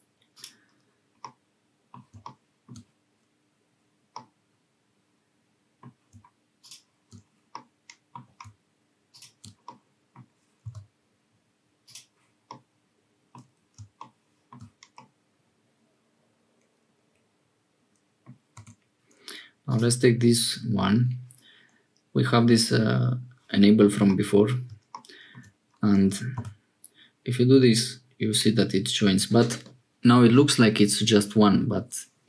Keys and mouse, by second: 1.2 middle click, 4.1-5.8 drag, 7.5 click, 9.6 click, 10.6 x, 12.4 click, 14.9-17.3 middle drag, 17.4 middle click, 18.5 1, 24.0 middle click, 26.3 g.